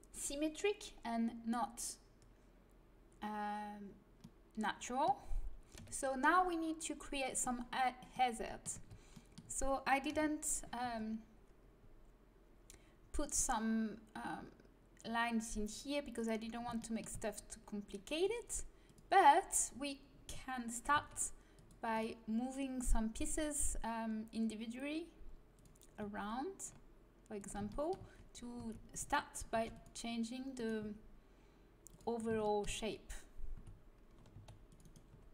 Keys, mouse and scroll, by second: 4.0-5.7 middle drag, 5.7 KP_1, 8.5 middle click, 8.7 Tab, 10.0 KP_1, 10.8 z, 16.7 middle click, 18.8-20.9 drag, 20.9 c, 23.2-25.1 drag, 25.9 g, 27.6 click, 28.5 a, 29.5 c, 30.7 g, 32.2 middle click, 33.5 a, 34.3 c, 34.9 right click, 35.0 g.